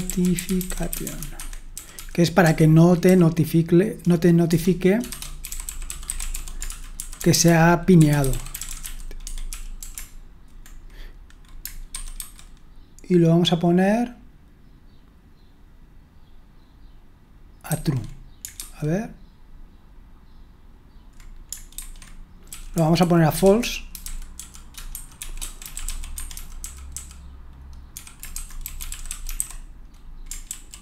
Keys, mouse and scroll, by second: 0.0-3.0 typing, 4.3-10.0 typing, 11.9 super+1, 12.0-12.7 typing, 17.8 super+1, 18.5 super+2, 21.8 super+1, 22.2-30.8 typing, 30.5 ctrl+w.